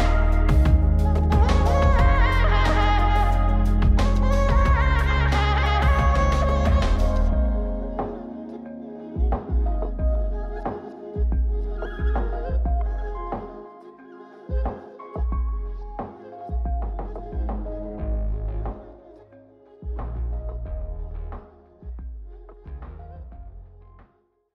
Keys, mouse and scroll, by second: 2.4 click, 3.8-4.9 drag, 5.3 click, 6.5-8.3 drag, 10.1 click, 12.1 click, 15.5 click, 16.1 click, 16.8 click, 18.3 click, 20.4 click, 20.9 click.